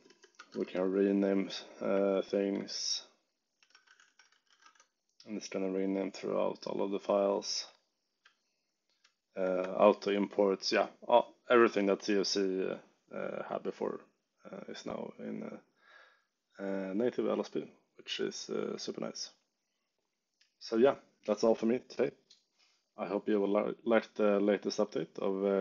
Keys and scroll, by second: 0.0-5.0 typing, 8.1 u.